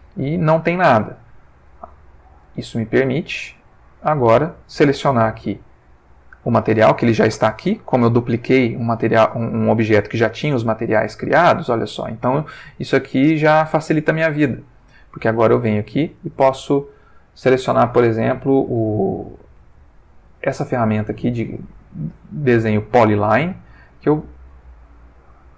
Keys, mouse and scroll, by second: 2.6 click, 4.0 click, 18.3 click, 23.9 click, 25.0 click.